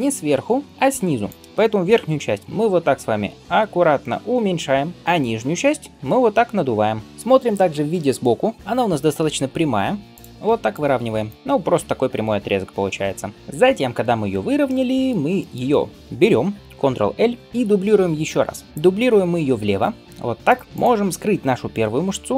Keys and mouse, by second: 2.1 alt+s, 6.0 alt+s, 9.2 g, 10.3 g, 11.3 g, 11.6 g, 13.3 g, 13.4 KP_3, 17.0 ctrl+l, 17.4 KP_1, 19.5 shift+d, 20.6 click, 22.2 l.